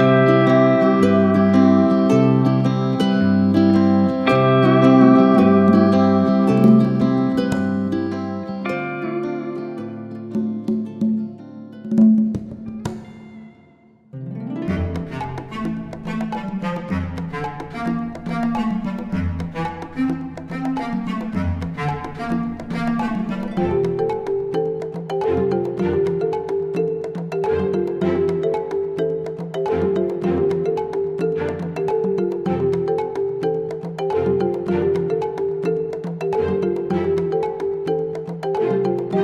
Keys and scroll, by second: 8.1 ctrl+d, 9.0 ctrl+KP_Multiply, 19.5-19.9 typing.